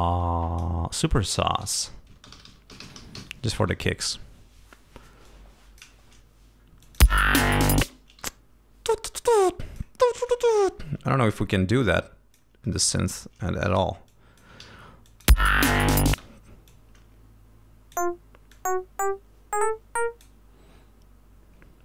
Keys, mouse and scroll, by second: 1.4-3.7 typing, 5.2 click, 6.8 click, 7.0 space, 7.8 space, 9.4 click, 10.0 scroll down 2, 10.6 ctrl+scroll up 2, 11.0 ctrl+d, 11.5-12.5 ctrl+drag, 13.7 g, 14.1 click, 14.6 d, 15.1 click, 15.3 space, 15.6 ctrl+scroll up 2, 16.1 ctrl+space, 16.7-18.1 drag, 18.5-20.4 drag.